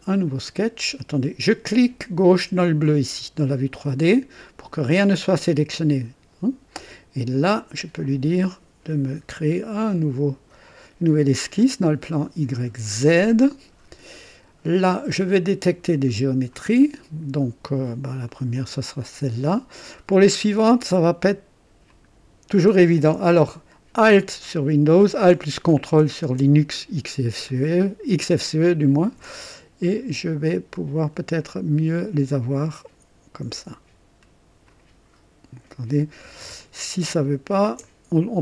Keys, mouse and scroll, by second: 2.4 click, 7.4 click, 11.4 click, 12.8 click, 16.5 click, 18.2 click, 19.1-19.4 scroll up 1, 21.9 click, 27.5-29.3 drag, 31.4 click, 34.6 click, 36.6 ctrl+alt+click, 37.8 ctrl+alt+right click.